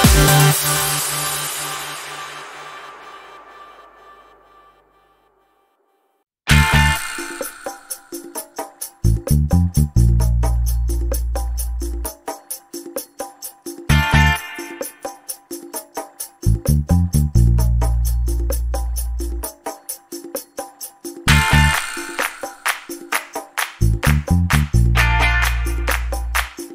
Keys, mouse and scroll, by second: 0.5 ctrl+click, 2.9 click, 4.2 click, 6.7 ctrl+z, 11.0 ctrl+d, 12.8 click, 14.7 click, 16.5 ctrl+z, 18.3 ctrl+shift+8, 21.5 click, 24.7 click, 25.9 click.